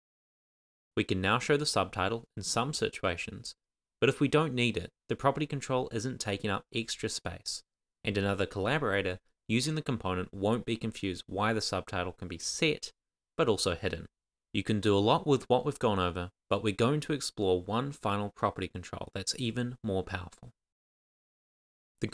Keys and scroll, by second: 0.7 shift+m, 1.8 shift+e.